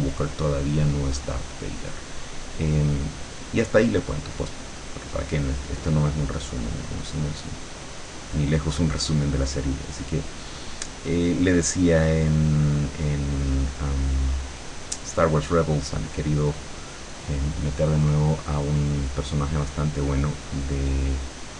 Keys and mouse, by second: 2.7-8.7 drag, 9.2-13.8 drag, 20.1-21.5 drag.